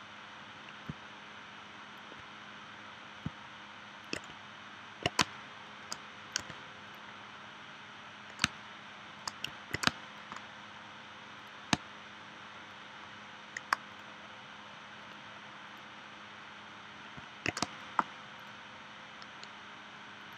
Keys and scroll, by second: 5.2 space, 6.4 v, 8.4 space, 9.5 v, 9.8 space, 11.7 space, 17.6 space.